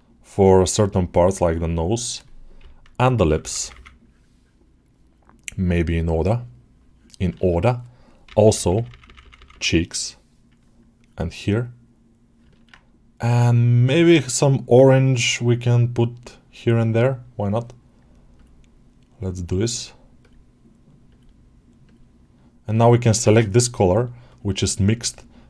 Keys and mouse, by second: 3.9-6.8 drag, 10.8-12.2 drag, 12.4 ctrl+middle click, 13.0 click, 13.4 click, 14.2-18.3 drag, 20.1-21.8 drag, 23.5 click, 23.9 click, 24.1 click, 24.4 click, 24.7 click.